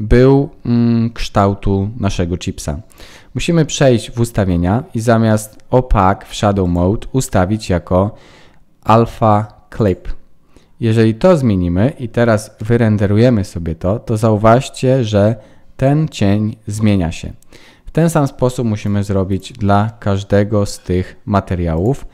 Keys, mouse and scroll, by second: 6.6 click, 12.6 F12, 18.8 click.